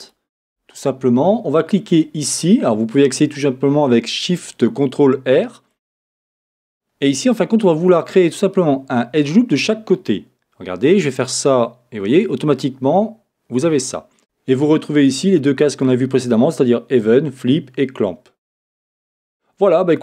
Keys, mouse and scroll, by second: 0.1-6.6 alt+shift+drag, 6.6-13.9 middle drag, 13.9 click, 17.0 click.